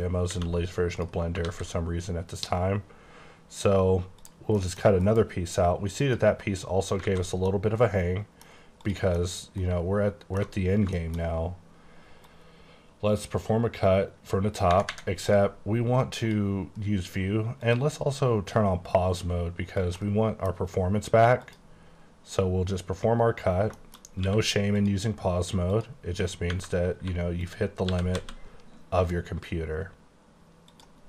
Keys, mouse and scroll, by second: 0.4 space, 1.5 alt+a, 4.3 click, 4.6 middle click, 5.1 alt+m, 6.1 click, 6.9 scroll down 3, 7.1 alt+a, 7.6 middle click, 8.9 click, 9.2 middle click, 10.7-11.4 scroll up 3, 11.0 shift+middle click, 12.3 click, 16.3 click, 17.7 click, 18.5 click, 20.1 middle click, 21.5 click, 21.9-23.7 scroll down 2, 23.7 shift+scroll down 3, 23.8 shift+middle click, 24.1 scroll up 1, 24.3 q, 24.9 click, 25.8 click, 26.3 scroll down 1, 26.6 Tab, 26.9 3, 27.5 click, 28.0 typing, 30.8 click.